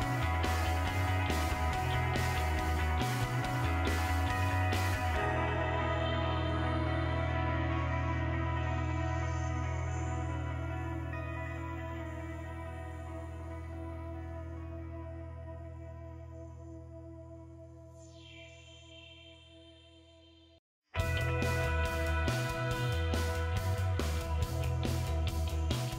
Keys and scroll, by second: 0.6-4.2 typing, 6.3-7.7 typing.